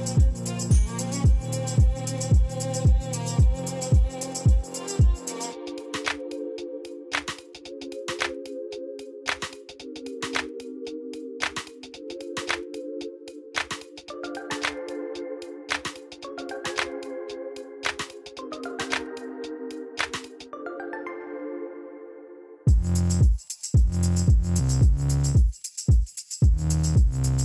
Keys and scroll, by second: 4.7 e, 6.8 z, 7.5 ., 7.8 4, 8.5 Return, 9.9 ctrl++, 10.8 p, 14.1-15.9 typing, 19.5 Return.